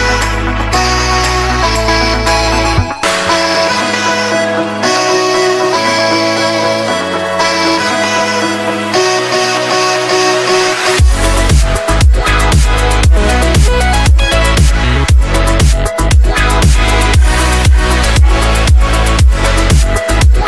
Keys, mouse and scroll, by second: 0.4 F11, 0.4 F10, 1.0 click, 1.4 Delete, 2.2 click, 7.7 right click, 8.1-8.6 scroll down 2, 8.6 right click, 9.4-11.3 drag, 10.7 Delete, 11.7 scroll up 1, 12.3 click, 12.9 Delete, 13.2 right click, 14.4-20.0 drag.